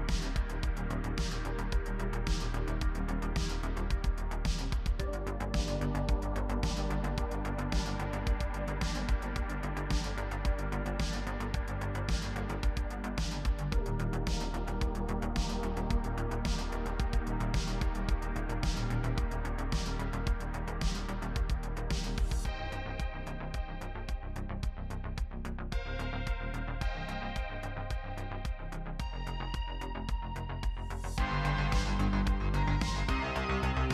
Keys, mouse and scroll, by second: 0.1 KP_1, 0.3 z, 0.4 Tab, 0.5 scroll down 1, 0.6 shift+middle click, 0.6 scroll up 1, 0.7 middle click, 0.8 scroll down 1, 1.0 click, 1.4 KP_3, 1.5 scroll up 3, 1.5 shift+middle click, 1.6 e, 2.0 scroll down 2, 2.0 middle click, 2.2 middle click, 2.3 Tab, 2.5 middle click, 2.6 shift+click, 2.6 KP_3, 3.2 middle click, 3.3 ctrl+r, 3.6 middle click, 3.7-5.0 typing, 3.7 scroll down 1, 3.8 middle click, 3.8 shift+middle click, 3.9 scroll up 2, 3.9 middle click, 4.0 scroll down 1, 4.1 middle click, 4.5 middle click, 5.2 scroll down 1, 5.2 shift+middle click, 5.3 scroll up 2, 5.3 shift+middle click, 5.4 scroll down 1, 5.4 shift+middle click, 5.5 scroll up 1, 5.6 click, 5.8 scroll down 4, 5.9 Tab, 5.9 middle click, 6.0 Tab, 6.0 middle click, 6.0 scroll up 4, 6.1-9.7 typing, 6.1 shift+middle click, 6.2 ctrl+r, 6.5 middle click, 6.8 scroll down 1, 6.9 middle click, 6.9-7.4 scroll up 3, 7.4 scroll down 1, 7.4 middle click, 7.9 middle click, 8.0 scroll up 1, 8.0 ctrl+r, 8.2 Tab, 8.2 scroll down 5, 8.3 middle click, 8.5 shift+middle click, 8.9-9.2 scroll up 3, 9.0 Tab, 9.2 shift+middle click, 9.2 shift+middle click, 9.3 scroll down 1, 9.4 click, 10.3 scroll down 2, 10.3 middle click, 10.5 shift+click, 11.2-13.8 typing, 11.5 middle click, 11.6 Tab, 11.6 middle click, 11.7 scroll up 3, 11.8 middle click, 11.9 middle click, 12.8 middle click, 12.9 Tab, 13.3 shift+middle click, 13.3 scroll up 2, 13.4 middle click, 13.5 Tab, 13.5 scroll down 3, 13.5 middle click, 13.6 Tab, 13.6 shift+middle click, 13.7 scroll up 1, 13.9 shift+middle click, 13.9 click, 15.7 middle click, 15.9-24.3 typing, 15.9 scroll up 3, 16.0 scroll down 4, 16.1 middle click, 16.1 Tab, 16.2 middle click, 16.3 Tab, 16.3 middle click, 16.4 scroll up 1, 16.5 ctrl+r, 16.8 shift+middle click, 17.0-18.6 scroll up 3, 17.7 middle click, 18.0 middle click, 18.2 Tab, 18.2 shift+middle click, 18.6-19.0 scroll down 8, 18.7 middle click, 19.0 shift+middle click, 19.0-19.3 scroll up 3, 19.4 scroll down 3, 19.6 scroll up 1, 19.7 click, 20.4 middle click, 20.6 middle click, 20.8 click, 21.6 shift+middle click, 21.7 ctrl+r, 21.8 middle click, 22.0 middle click, 22.0 Tab, 22.1 middle click, 22.1 scroll down 4, 22.1 middle click, 22.2-22.6 scroll up 4, 22.2 middle click, 22.4 middle click, 22.7 click, 23.4 middle click, 23.6 click, 23.7 middle click, 23.7 Tab, 23.8 middle click, 23.8 scroll down 4, 23.8 middle click, 24.2 middle click, 24.3 scroll down 1, 24.4 middle click, 24.5 scroll up 3, 24.6 click, 24.6 middle click, 24.7 Tab, 24.7 middle click, 24.8 Tab, 25.1 shift+middle click, 25.1-26.4 scroll up 5, 25.4 middle click, 25.6 KP_3, 25.6 click, 26.0 shift+d, 26.1 s, 26.3 shift+middle click, 26.4 click, 27.9 scroll up 1, 28.0 ctrl+r, 28.0-29.6 typing, 28.3 Tab, 28.4 middle click, 28.5 click, 28.7 scroll up 1, 29.6 scroll up 1, 30.2 scroll down 1, 30.3-31.8 scroll up 3, 30.4 middle click, 30.4 ctrl+r, 30.6 alt+click, 30.7 KP_1, 31.8 shift+middle click, 32.0 e, 33.6 shift+click.